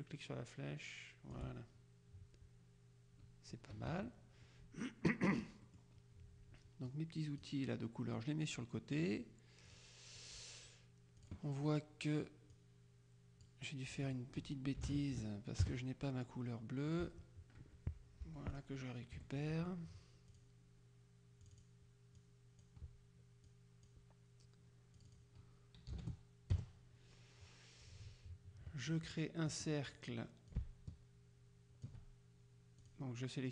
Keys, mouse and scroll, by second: 3.8 KP_Subtract, 5.3-6.4 drag, 7.0-8.0 drag, 8.3-9.8 drag, 11.3 click, 12.7-14.0 drag, 14.1 click, 14.9 KP_1, 14.9 KP_0, 15.7 KP_Enter, 17.0 click, 18.3 F7, 18.6 click, 19.3 F1, 20.4 click, 21.5 click, 23.5 click, 25.1 click, 26.0 KP_0, 26.6 KP_Enter, 29.6 click, 30.6-32.4 ctrl+shift+drag, 32.9 click.